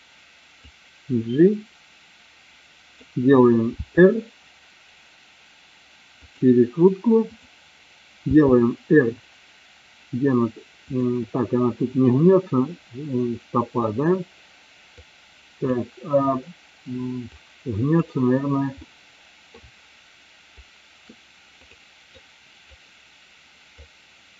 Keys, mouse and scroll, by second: 0.8-3.1 drag, 3.9 r, 6.2 click, 8.4 r, 10.9 click, 15.1 click, 17.8 click, 19.0-19.8 middle drag, 21.6 click, 22.4-22.9 drag, 23.9-24.3 drag.